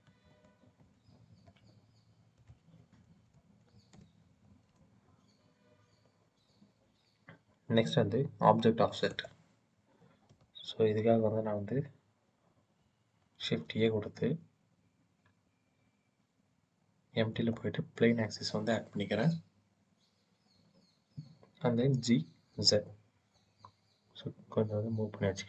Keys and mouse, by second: 0.1 ctrl+z, 0.5 ctrl+z, 2.4-3.6 drag, 8.9 click, 10.1 Tab, 13.2 shift+a, 21.6 g, 22.4 z.